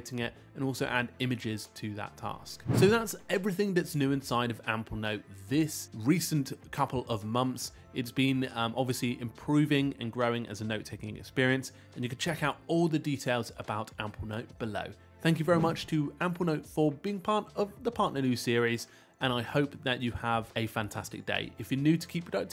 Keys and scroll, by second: 13.2 Return.